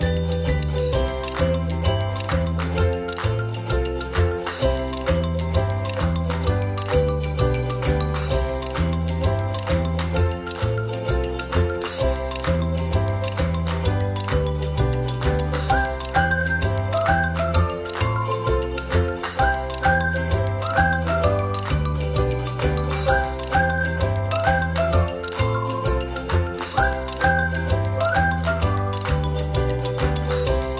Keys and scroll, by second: 8.5 ctrl+c, 8.7 ctrl+f, 10.0 o, 12.1 ctrl+-, 12.3 ctrl+-, 21.2 ctrl+=, 21.4 ctrl+=, 21.8 ctrl+z.